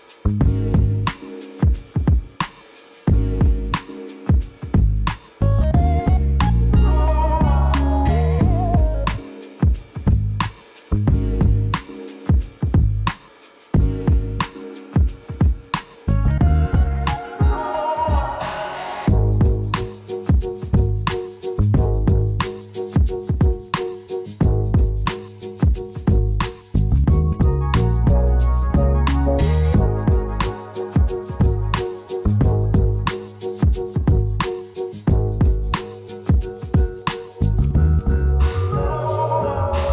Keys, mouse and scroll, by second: 5.2 KP_0, 6.8-8.2 scroll down 1, 12.8 s, 13.8 right click, 15.0-20.9 drag, 18.8 s, 32.4-33.0 scroll down 2, 32.5-36.3 middle drag, 34.2 Tab, 35.0 ctrl+r, 36.3 click, 37.0-37.4 scroll down 1, 37.4 s, 38.8 click, 39.4 ctrl+r.